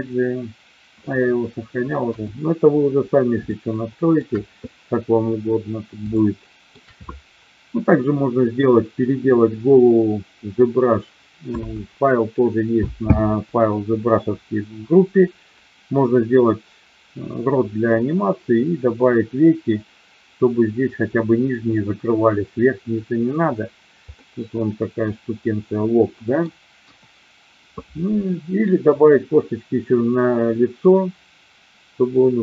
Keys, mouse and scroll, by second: 2.1 KP_1, 3.5-4.2 shift+middle drag, 6.1-6.7 shift+middle drag, 24.1-26.3 middle drag, 26.7 KP_1.